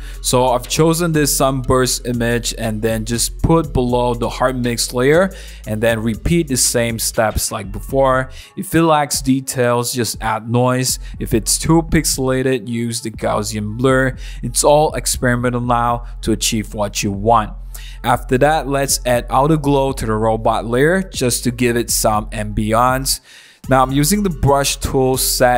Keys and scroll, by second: 6.8 shift+h, 7.0 Return, 8.4 super+1, 9.0-10.2 typing, 10.5 super+0, 10.5 super+-, 11.2 super+t, 11.7 Return, 11.8 super+z, 11.8 super+t, 12.4 Return, 12.8 w, 13.4 super+i, 13.5 v, 14.5 v, 14.5 super+-, 14.6 super+t, 14.9 Return, 15.4 super+z, 15.4 super+z, 15.6 BackSpace, 17.0 alt+super+e, 17.0 w, 17.2 super+d, 17.8 v, 17.9 super+1, 18.9-22.1 typing, 23.6 ], 23.6 ], 23.7 [, 23.9 super+z, 25.2 v, 25.3 super+1, 25.4 super+=.